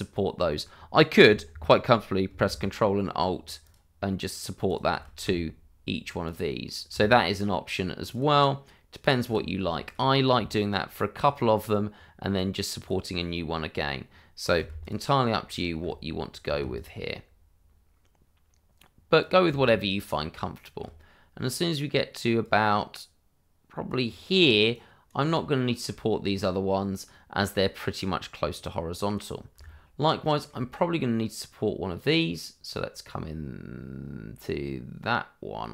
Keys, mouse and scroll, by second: 3.6 click, 4.6 click, 6.2 ctrl+alt+click, 8.1 ctrl+alt+click, 9.0 click, 9.7 shift+middle click, 12.7 middle click, 12.9 click, 14.8 ctrl+alt+click, 16.7 ctrl+alt+click, 19.2 ctrl+alt+click, 19.7 shift+middle click, 22.4 click, 24.4-24.7 scroll down 1, 24.7 right click, 25.3 shift+middle click, 26.1 scroll up 1, 28.5 right click, 29.6 shift+middle click.